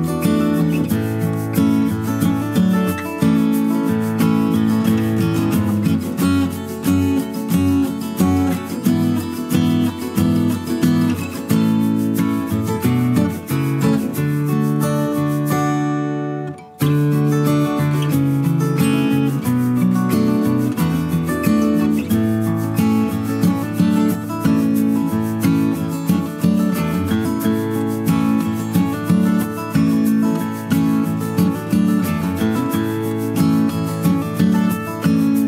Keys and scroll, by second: 15.8 ctrl+z, 30.5 Left, 31.2 Right.